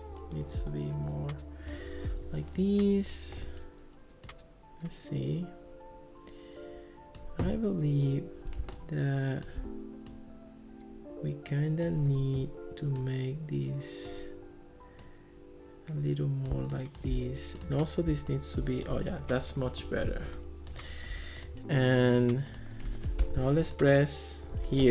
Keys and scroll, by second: 23.2 Escape.